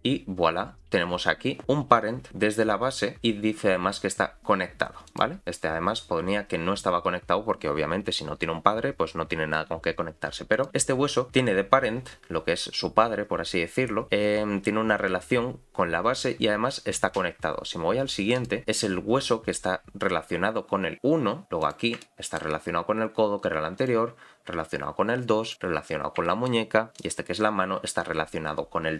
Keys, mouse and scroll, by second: 0.0 click, 5.1 click, 10.5 click, 18.3 click, 21.6 click, 22.0 shift+middle click, 23.8 click, 25.4 click, 26.2 shift+middle click, 26.9 click.